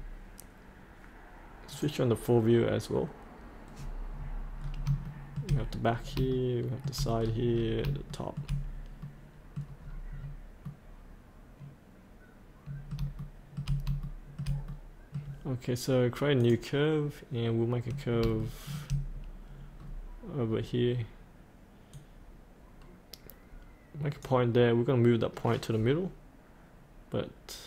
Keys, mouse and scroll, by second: 1.7 click, 3.7-4.8 scroll up 1, 5.0 shift+middle click, 5.9 scroll up 1, 6.3 shift+middle click, 7.2 scroll up 1, 8.1 shift+middle click, 9.0 middle click, 9.8-10.6 scroll up 1, 10.6-13.0 middle drag, 13.2 shift+middle click, 14.0 shift+middle click, 16.4 click, 17.8-18.2 scroll down 1, 18.4 shift+middle click, 19.1-19.7 scroll up 1, 19.7-21.8 scroll down 1, 21.9-27.6 drag.